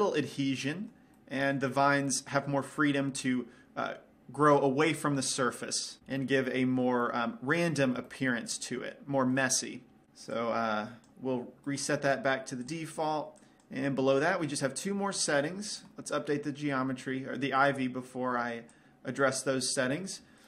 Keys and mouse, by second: 1.0 middle click, 1.5 middle click, 7.8-9.9 middle drag, 10.9-16.0 drag, 12.2-14.1 right drag, 18.7-20.4 drag.